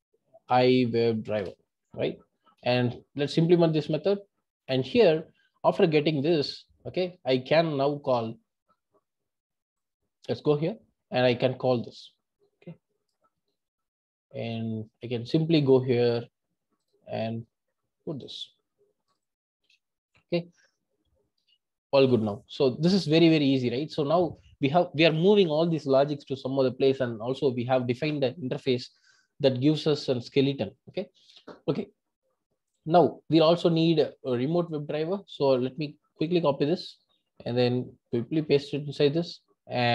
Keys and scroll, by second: 1.5 Return, 2.5 alt+Return.